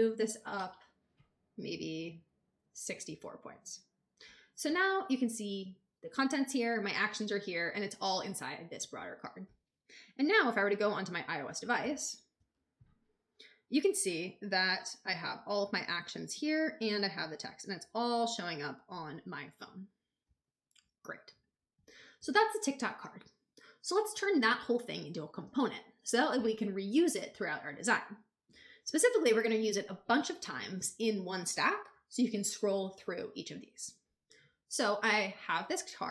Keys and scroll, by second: 0.3 alt+shift+Up, 1.4 alt+Up, 11.7 shift+super+b.